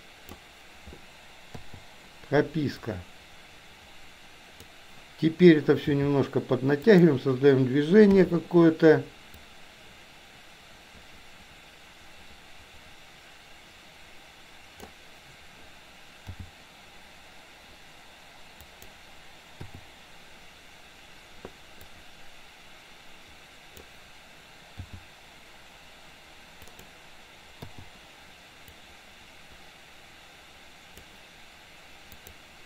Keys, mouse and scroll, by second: 1.6 i, 3.0-4.8 drag, 5.8 g, 8.2 i, 9.5-15.0 drag, 16.3 g, 19.7 i, 22.0-24.0 drag, 24.8 g, 27.7 i, 28.8-31.1 drag, 32.1 click.